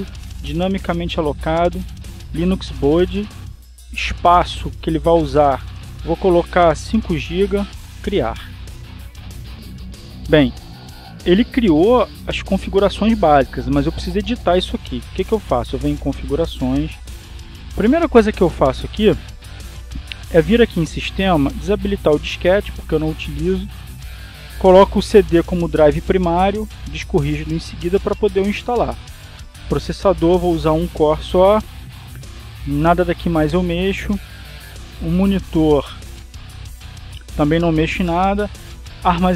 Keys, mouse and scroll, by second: 0.0 click, 1.9 click, 5.7-6.7 drag, 8.2 5, 9.3 click, 17.3 click, 21.1 click, 23.4 click, 25.2 click, 26.0 click, 27.8-29.0 drag, 30.5 click, 32.8 click, 33.8 click, 36.1 click.